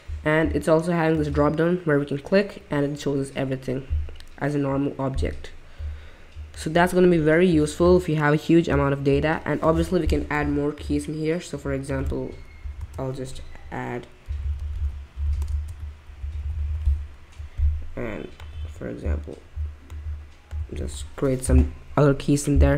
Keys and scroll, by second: 12.8 Return, 14.0-19.1 typing, 20.3-21.1 typing.